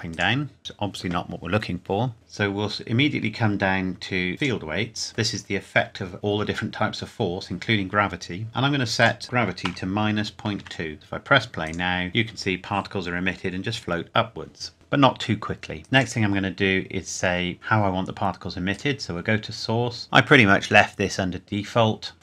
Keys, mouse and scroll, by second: 1.7-2.1 scroll down 1, 2.7-3.1 scroll down 1, 4.4 click, 5.1 scroll down 1, 9.0 click, 9.7 KP_Subtract, 10.2 KP_Decimal, 10.6 KP_2, 10.9 KP_Enter, 11.7 click, 15.8 scroll up 1, 16.0 click, 18.7 click.